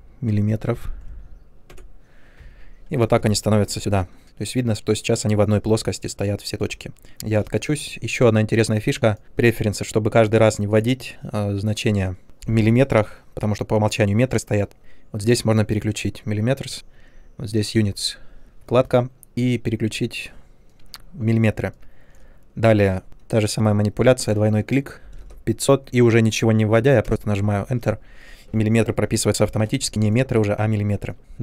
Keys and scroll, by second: 0.8 Insert, 0.8 BackSpace, 2.2 typing, 7.1 ctrl+z, 25.0 typing, 27.0 Return, 31.2 ctrl+z.